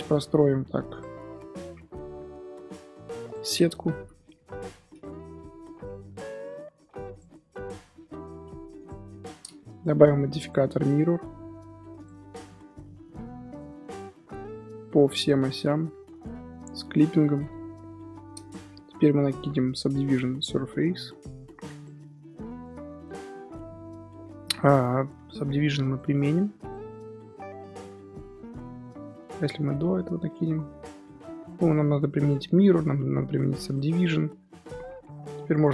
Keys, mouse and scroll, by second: 0.0 k, 6.4 k, 9.8 Tab, 12.0 drag, 12.2 scroll down 4, 12.4-13.0 middle drag, 13.0 scroll down 2, 13.1-14.1 middle drag, 14.1 click, 15.0 click, 15.4 scroll down 1, 15.5-16.9 middle drag, 16.9 click, 17.2-17.7 middle drag, 17.7 KP_7, 18.2 scroll up 2, 21.8-22.6 drag, 22.6 z, 23.0-25.8 middle drag, 25.8-27.6 drag, 27.6-28.0 middle drag, 28.0 ctrl+z, 28.9-29.5 drag, 30.4 ctrl+z, 31.5-34.1 drag, 34.1 Tab, 34.5-35.6 middle drag, 35.6 scroll up 2.